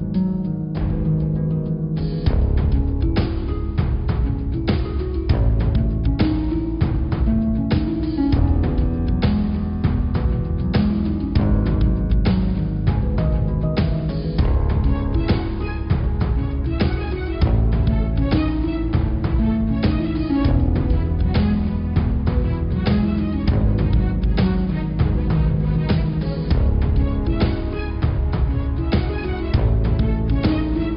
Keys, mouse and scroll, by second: 2.6-4.2 middle drag, 4.2-4.6 scroll down 1, 4.6 Tab, 4.9-5.4 scroll up 3, 5.4 click, 6.0 click, 7.5 click, 8.0 scroll up 2, 9.0-11.1 middle drag, 15.0 g, 17.4-18.2 scroll down 5, 18.2-19.3 middle drag, 19.3 scroll up 2, 19.9 click, 20.4-21.5 scroll up 4, 21.5 g, 25.3 Tab, 25.6 middle click, 26.0 Tab, 26.2-26.8 scroll down 5, 26.8 Tab, 28.7 Tab, 29.6 Tab, 30.0-30.7 scroll up 2, 30.7 middle click.